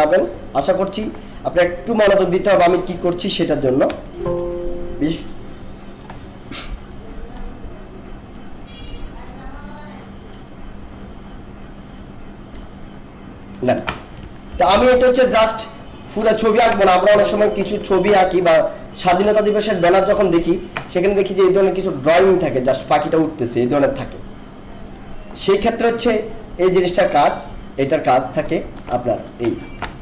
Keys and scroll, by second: 14.5 ctrl+-, 16.8 alt+space, 29.9 alt+space.